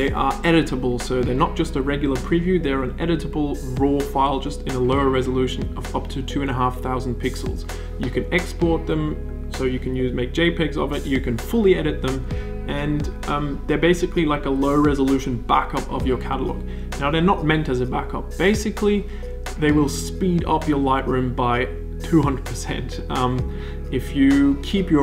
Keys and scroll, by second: 1.7 d.